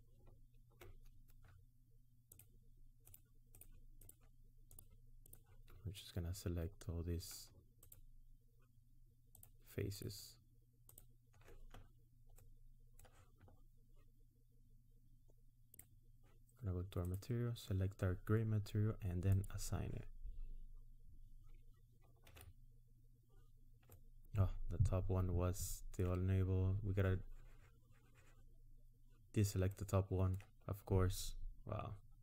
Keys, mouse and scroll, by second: 2.5 shift+click, 3.2 shift+click, 4.2-6.2 shift+click, 5.8-6.1 scroll down 2, 7.9 ctrl+click, 9.5 ctrl+click, 10.0 ctrl+click, 11.0 ctrl+click, 12.0-12.3 scroll down 2, 12.3 middle click, 15.7 click, 17.0 click, 19.4 click, 22.2 ctrl+z, 23.9 middle click, 29.7 middle click.